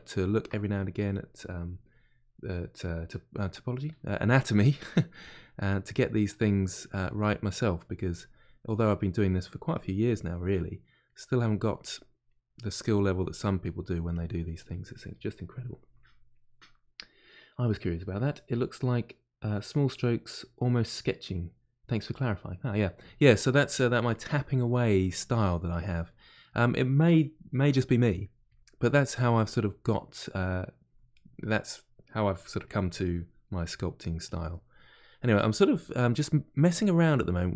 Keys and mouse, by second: 0.6-3.9 drag, 3.9 f, 4.9 click, 5.7-6.8 middle drag, 6.8 click, 7.2 middle click, 7.9 click, 8.8 middle click, 9.7 click, 10.5 middle click, 11.1 click, 11.7-13.6 middle drag, 13.6-25.0 drag, 25.0-28.0 middle drag, 28.0 click, 28.8 middle click, 29.4 click, 30.1-32.1 middle drag, 32.1-33.5 drag, 33.5 middle click, 34.2 click, 34.5 middle click, 35.5 click, 36.1-37.1 middle drag, 37.1 click.